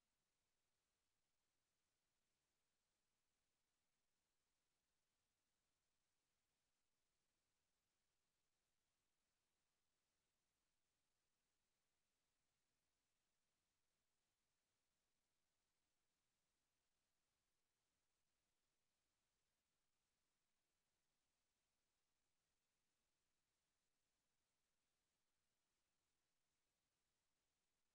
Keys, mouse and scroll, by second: 0.0-1.9 drag, 2.5-7.6 drag, 7.6 middle click, 11.5 drag, 20.8-23.4 drag.